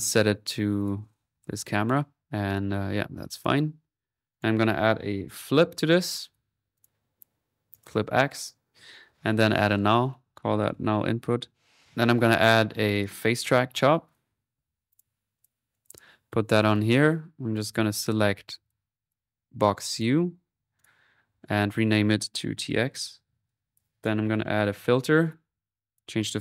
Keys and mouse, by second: 0.0-0.1 typing, 2.2 click, 2.6 typing, 3.3 click, 4.3-5.5 right drag, 5.2-6.0 typing, 6.3-7.4 drag, 7.7-10.9 drag, 9.5 alt+n, 12.9 click, 13.3-14.0 typing, 14.0-16.1 drag, 16.1 middle click, 16.6 click, 17.5 right click, 17.8-18.5 typing, 19.1 click, 19.9-21.3 drag, 21.7 click, 23.7 click, 23.9 right click, 24.3-25.7 typing, 25.9-26.4 drag.